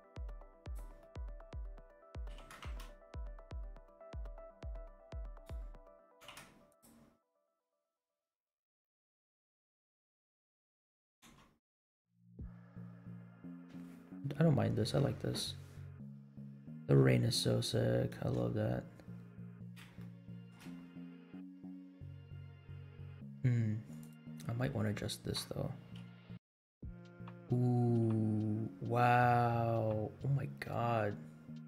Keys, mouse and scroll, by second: 0.5-1.0 drag, 1.6 middle click, 2.0 scroll up 2, 2.3 g, 6.0 g, 7.1 scroll up 2, 7.6 space, 9.1 scroll down 1, 10.6 space, 11.3 space, 11.9 scroll up 2, 15.1 scroll up 1, 15.6-16.2 scroll up 4, 17.0 space, 17.3-17.8 scroll down 5, 18.2 space, 18.6 scroll down 1, 20.0-20.5 shift+middle drag, 23.1 space, 23.9 click, 25.9 g.